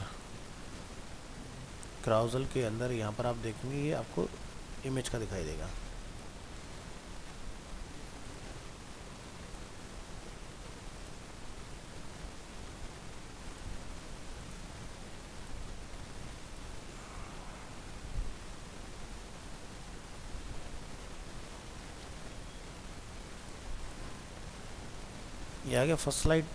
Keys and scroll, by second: 0.9 ctrl+s, 20.6 ctrl+s, 21.6 alt+Tab.